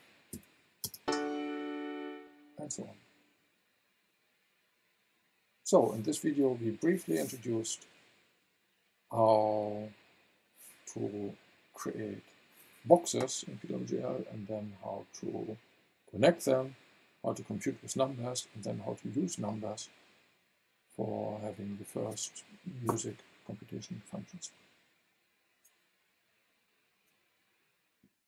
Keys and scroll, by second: 0.3 v, 0.8 space.